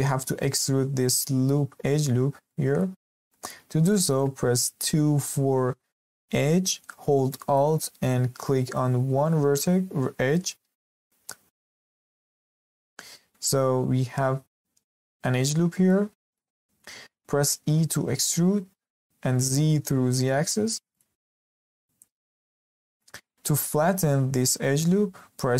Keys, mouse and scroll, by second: 0.0-2.9 shift+middle drag, 2.9-3.3 scroll up 2, 3.3-3.6 shift+middle drag, 3.6 scroll up 1, 3.9 shift+middle click, 4.7 2, 7.3-10.3 middle drag, 12.1 alt+click, 15.5 scroll down 2, 15.8-17.4 middle drag, 17.4 e, 21.2 scroll down 2, 21.5-22.5 shift+middle drag, 22.5-22.8 scroll up 2, 22.8-23.6 shift+middle drag, 23.3-23.6 scroll up 1.